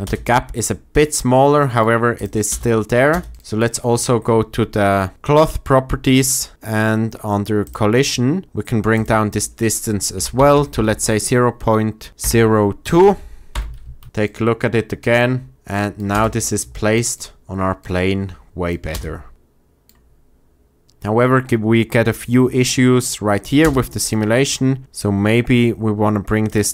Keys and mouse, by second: 0.0 space, 2.4 space, 3.0 space, 9.0-13.5 drag, 10.3 BackSpace, 10.6 BackSpace, 13.9 shift+Left, 14.0 space, 16.0 space, 18.8 space, 23.5 space, 26.5-26.7 drag.